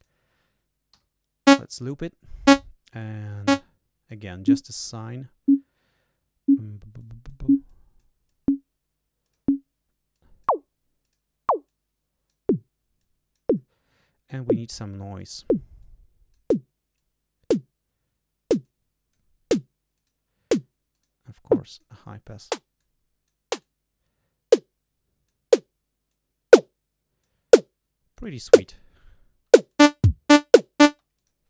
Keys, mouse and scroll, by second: 0.9 l, 3.2 click, 4.0 click, 6.9 click, 7.6 click, 8.2 click, 9.2 click, 10.1 click, 11.0 click, 11.6 click, 12.9 click, 15.1 click, 15.7 click, 16.9 click, 18.6 click, 19.9 click, 20.9 click, 21.5 click, 22.7 click, 23.5-25.4 drag, 26.0-27.4 drag, 28.1 click, 29.6 click, 30.8 space.